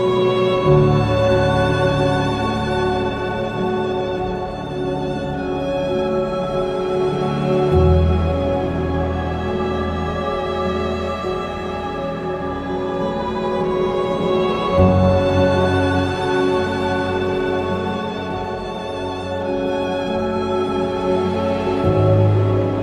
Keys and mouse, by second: 0.7 click, 1.9 Tab, 5.2 Tab, 6.2 1, 7.7 g, 7.8 g, 11.1 j, 12.8 g, 13.0 g, 13.7 click, 13.9 click, 14.4 q, 15.1 Tab, 18.4 click, 18.6 Tab, 22.6 shift+click.